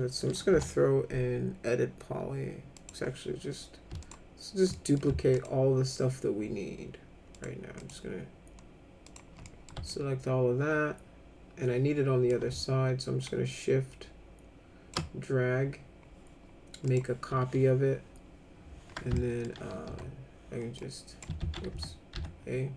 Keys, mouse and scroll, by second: 0.5 e, 2.7 click, 4.0 ctrl+click, 4.7 middle click, 5.3 ctrl+click, 7.3 ctrl+click, 7.8 ctrl+click, 9.1 ctrl+click, 9.4 middle click, 9.9-12.3 alt+middle drag, 13.2-14.9 shift+drag, 16.8 click, 19.1 alt+middle click, 19.8 e, 20.8 click, 21.4 ctrl+z, 21.7 a, 22.1 a.